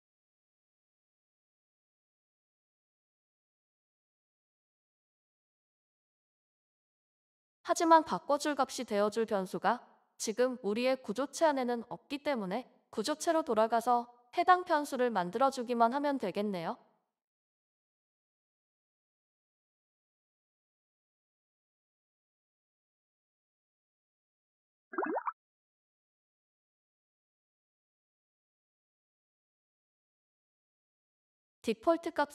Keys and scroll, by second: 0.0-6.5 typing, 2.2 Tab, 8.7-9.4 typing, 10.1 ctrl+b, 12.0 ctrl+b, 21.3 ctrl+c, 22.4 Return, 22.6 Return, 22.6 ctrl+v, 24.1 Left, 24.3 Left, 24.4 Left, 24.6 Left, 24.7-25.6 typing, 27.0-32.0 typing.